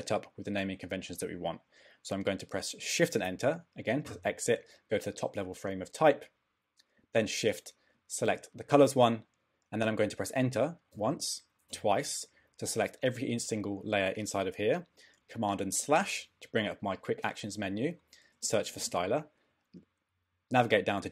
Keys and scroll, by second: 3.3 shift+Return, 10.9 Return, 15.8 super+/, 18.1-19.2 typing, 19.5 Down.